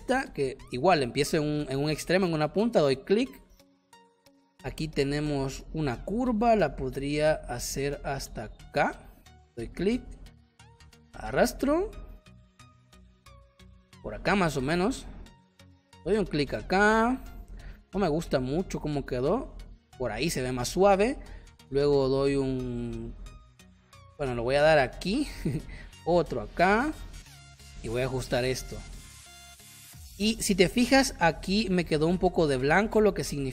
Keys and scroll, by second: 30.0 space.